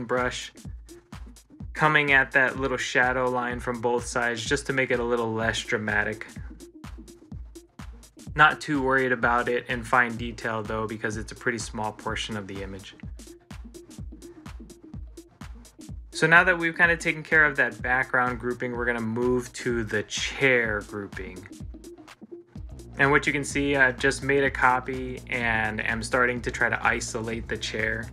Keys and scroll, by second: 2.1 ctrl+z, 11.3 ctrl+s, 18.4 ctrl+z, 19.7 ctrl+z.